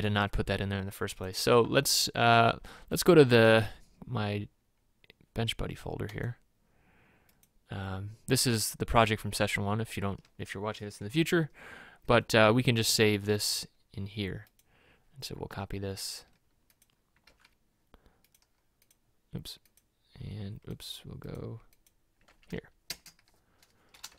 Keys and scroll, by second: 17.3 ctrl+c, 22.4 ctrl+v, 22.9 KP_Enter.